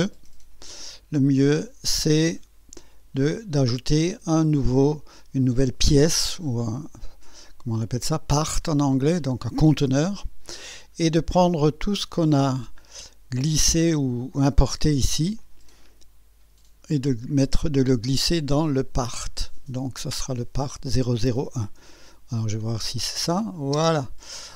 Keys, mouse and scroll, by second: 9.3 click, 15.4-17.4 drag, 22.7 click, 23.2 space, 23.8 space.